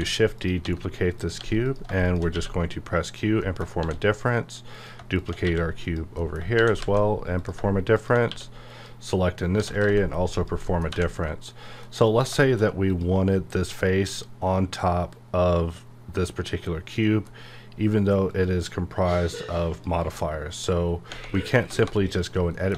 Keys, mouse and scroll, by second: 0.4 click, 0.6 s, 1.1 click, 1.4 g, 1.6 click, 2.0 shift+click, 2.3 q, 3.0 click, 3.4 middle click, 3.8 shift+d, 4.7 click, 5.4 q, 5.7 click, 6.1 middle click, 6.5 shift+d, 6.8 z, 7.4 click, 8.2 q, 8.7 click, 9.1 middle click, 9.4 scroll up 1, 9.6 g, 10.4 click, 10.6 middle click, 10.9 1, 11.1 middle click, 12.8 click, 13.3 scroll down 1, 17.0 middle click, 18.3 click, 19.9 click, 20.8 scroll up 1, 21.1 Tab, 21.4 middle click, 21.6 typing, 22.1 click, 22.5 middle click.